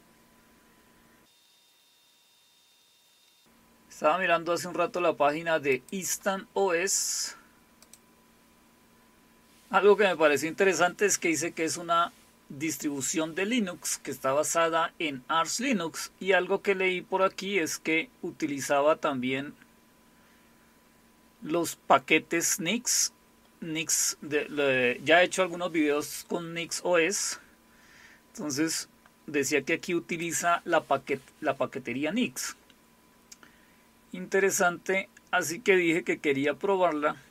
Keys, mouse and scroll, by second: 3.4-4.0 scroll up 2, 4.0 scroll up 1, 5.7 click, 7.8 click, 14.6 scroll down 2, 15.7 scroll down 2, 16.2 scroll down 2, 17.0 scroll down 2, 17.6-19.1 scroll down 6, 19.3-20.4 scroll up 2, 28.5-30.3 drag, 33.5-35.3 scroll down 1, 35.3-36.2 scroll down 2, 36.4-37.2 scroll down 2, 37.2-37.3 scroll down 4.